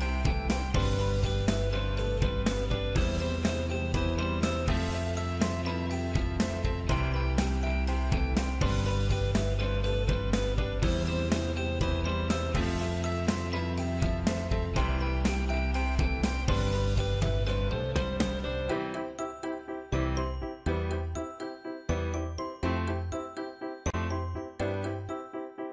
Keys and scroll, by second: 1.0 ctrl+f, 6.2 ctrl+z, 6.6 ctrl+c, 7.0 ctrl+f.